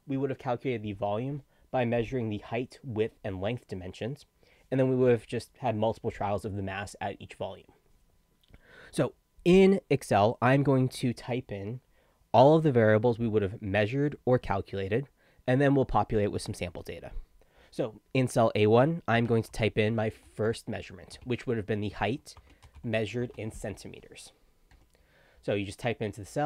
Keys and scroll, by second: 18.9-23.7 typing, 24.7 Return.